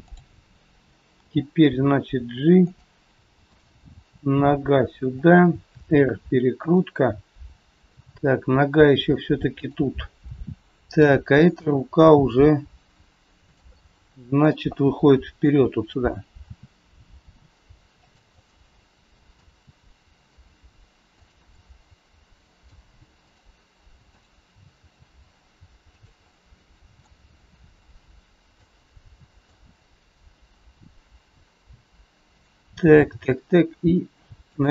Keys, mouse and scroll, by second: 0.0 click, 1.1 g, 3.5 click, 4.5 g, 5.6 r, 10.4 r, 10.6 middle click, 11.6 g, 13.6 scroll up 1, 13.7 middle click, 14.7 middle click, 16.4 r, 18.2 middle click, 19.5 r, 21.5 middle click, 23.2 click, 24.0 click, 24.7 r, 26.2 middle click, 27.1 scroll down 3, 28.9 middle click, 28.9 scroll up 2, 31.7 click, 33.1 g.